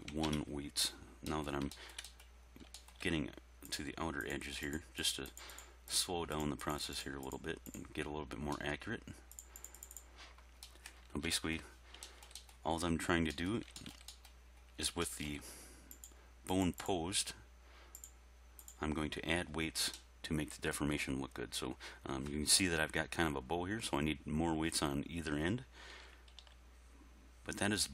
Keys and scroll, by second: 0.1 1, 0.3 Return, 25.9 r, 26.3 x.